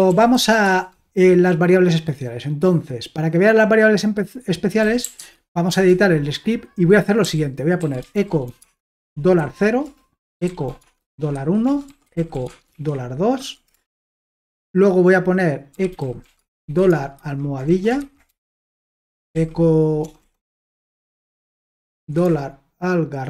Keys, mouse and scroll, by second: 0.0-0.8 typing, 4.5-5.5 typing, 5.7 Return, 7.2-13.4 typing, 13.7 Return, 15.5-17.9 typing, 18.7 Return, 19.1-22.0 typing.